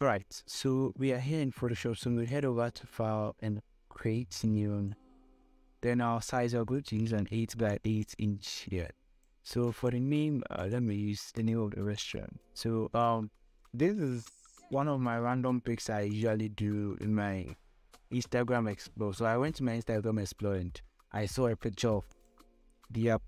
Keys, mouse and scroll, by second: 4.2 F8, 4.7 click, 8.0-14.7 drag, 14.7 ctrl+c, 16.4 click, 22.4 click.